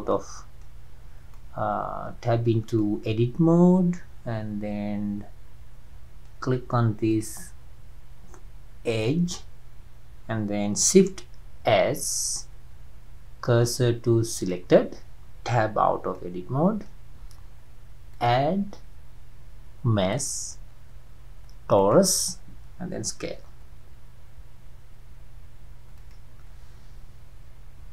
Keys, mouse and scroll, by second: 0.2-5.9 middle drag, 7.1 click, 11.7 shift+s, 15.8 Tab, 16.1-18.1 middle drag, 18.1-21.3 drag, 23.3 s, 27.6 KP_Decimal.